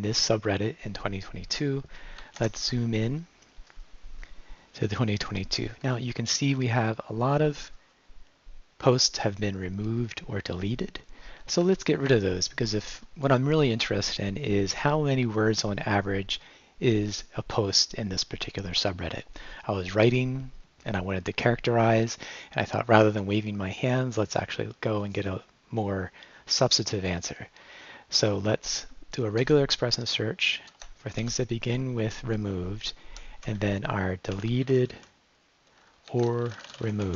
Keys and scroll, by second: 2.4 shift+', 5.6 Right, 6.5 Left, 11.7 Right, 29.4 shift+\, 30.7 \, 31.2 (, 33.2-37.1 typing.